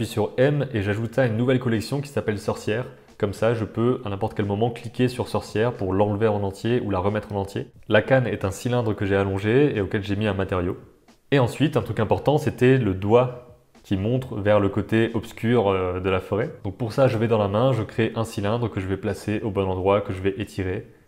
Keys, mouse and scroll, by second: 0.6 shift+click, 0.9 shift+click, 1.4 shift+click, 1.7 m, 4.2 click, 4.5-5.5 drag, 5.6 middle click, 7.6 middle drag, 7.8 click, 8.1 g, 8.6-9.0 middle drag, 9.2 g, 9.8 g, 10.1 middle click, 10.3 Tab, 10.5 click, 10.8 click, 11.0 g, 11.2 Tab, 11.3 click, 11.5 r, 11.8 g, 12.1 g, 12.9 Tab, 13.1 Tab, 13.2-15.5 typing, 14.2 middle click, 14.9 middle click, 16.3 middle click, 16.6 s, 17.0 middle click, 17.3 g, 17.5 g, 18.6 middle click, 18.9 g.